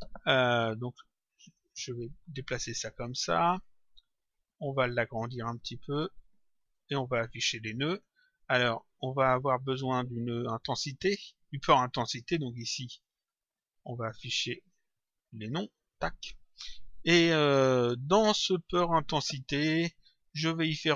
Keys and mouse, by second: 0.7 click, 2.3 click, 3.4 click, 6.7 click, 8.3 click, 10.4 click, 12.9 right click, 15.3 click, 19.7 click.